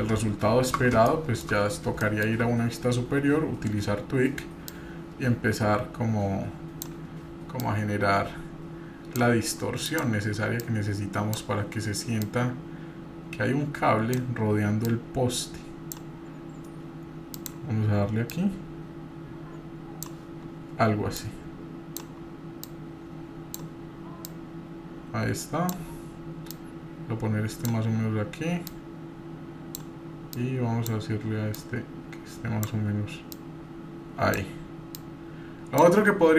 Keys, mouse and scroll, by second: 1.0 shift+middle click, 1.5-1.9 scroll up 3, 2.0 shift+middle click, 2.5-3.7 scroll up 2, 4.7-6.9 drag, 7.6-9.2 drag, 9.9 click, 10.6 click, 12.2-14.4 drag, 14.8-16.0 drag, 17.3 click, 18.3-20.0 drag, 21.1-22.1 drag, 22.6-23.7 drag, 24.3-25.8 drag, 26.5-29.9 drag, 30.3 click, 31.6-32.8 drag, 33.3-34.4 drag, 34.7 click, 35.0 click.